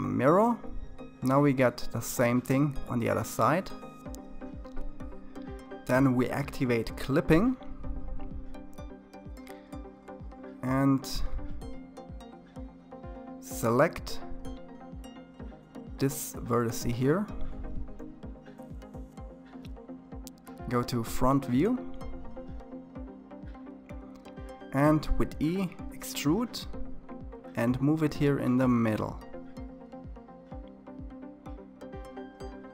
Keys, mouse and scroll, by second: 5.8 click, 8.0-8.9 scroll up 5, 8.9-11.3 middle drag, 11.3-11.7 scroll up 4, 11.7-15.4 middle drag, 15.4-16.8 scroll up 3, 16.8 scroll up 1, 17.0 click, 18.2-20.5 middle drag, 20.5 KP_1, 22.0-24.3 scroll down 8, 24.3 e, 30.3-32.2 middle drag, 32.2-32.7 drag.